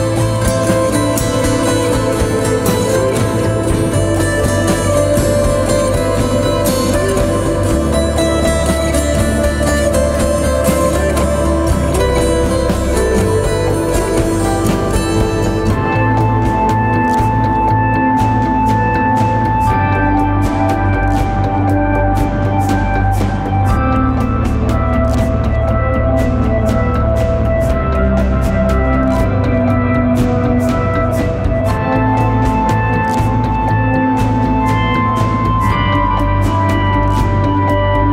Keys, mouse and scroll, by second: 13.5 typing.